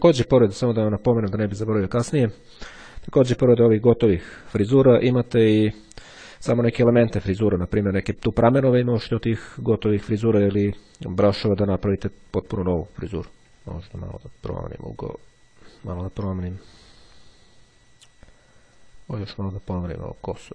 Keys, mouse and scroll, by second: 0.0-0.6 ctrl+scroll down 2, 1.6-2.2 ctrl+scroll down 2, 12.7-13.2 scroll up 2, 13.5-18.6 drag, 18.8-20.5 drag.